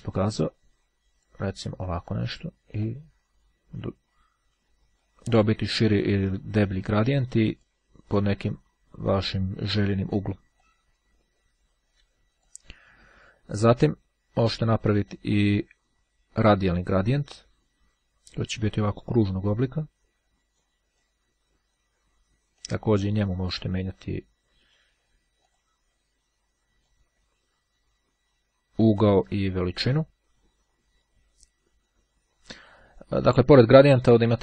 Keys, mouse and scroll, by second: 0.7-1.9 drag, 3.0-5.7 drag, 6.1-8.3 drag, 9.3-10.3 drag, 10.7-13.1 drag, 16.3-17.4 drag, 19.7-21.2 drag, 22.7-24.6 drag, 25.6 click, 26.9-30.6 drag, 34.3 click.